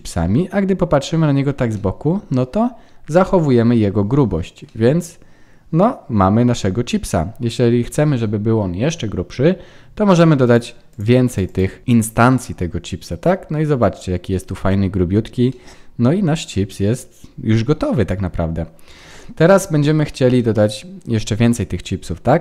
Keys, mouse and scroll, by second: 0.1 middle click, 1.3-1.7 scroll down 4, 1.7 middle click, 3.1 scroll up 3, 4.6 middle click, 8.0 scroll up 1, 8.1 middle click, 10.4-11.4 click, 11.2 click, 12.2 middle click, 15.0-15.8 scroll down 4, 15.4 middle click, 19.0 ctrl+s, 19.7-20.3 scroll down 5, 20.3 middle click.